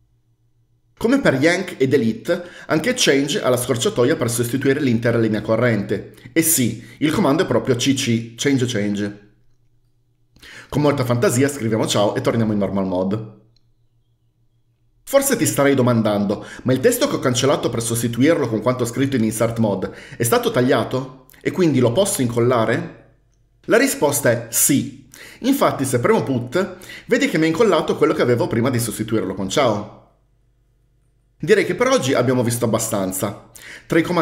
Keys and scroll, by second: 8.0 typing, 12.0-13.1 typing, 26.6 typing.